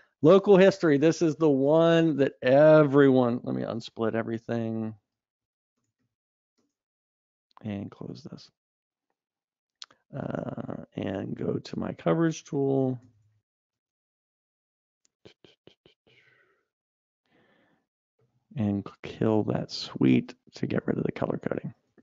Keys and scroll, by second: 13.3 super+e.